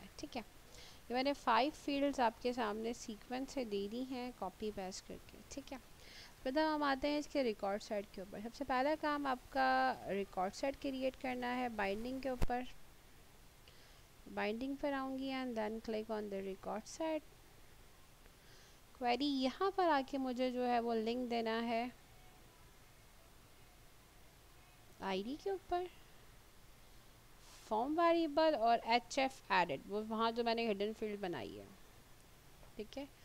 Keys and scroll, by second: 29.8 h, 30.0 f, 31.1-32.1 typing.